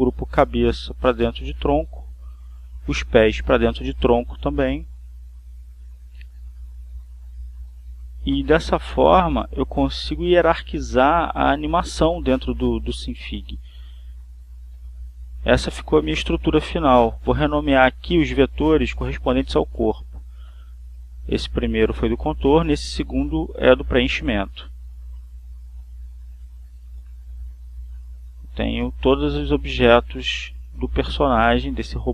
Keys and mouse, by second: 1.9 click, 2.8 click, 3.5-5.6 drag, 8.4 click, 9.2 click, 10.8 click, 11.8 click, 13.0 click, 16.9 click, 18.0-19.4 drag, 19.6-21.1 typing, 21.2 Return, 22.5 click, 23.4-25.3 typing, 27.9 click, 28.7 click, 29.6 click.